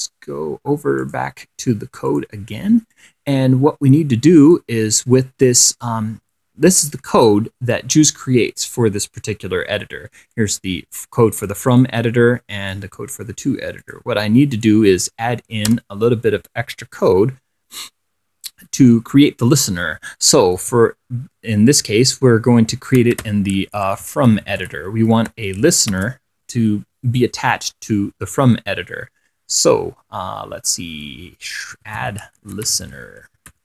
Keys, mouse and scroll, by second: 1.3 click, 2.3 click, 3.2-5.0 drag, 7.0 click, 10.6-12.0 drag, 12.0 click, 13.0 click, 14.1 click, 14.8 click, 16.0 Return, 20.9 f, 23.0-26.2 typing, 31.8-33.6 typing.